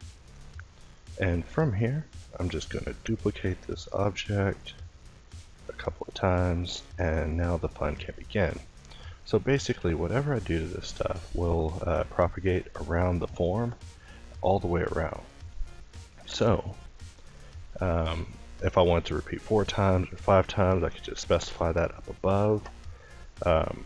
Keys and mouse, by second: 0.0 Tab, 0.9 a, 1.3 a, 5.9 a, 7.8 ctrl+i, 8.4 ctrl+t, 10.8 x, 12.0 Tab, 19.8 Tab, 21.0 middle click, 23.2 l.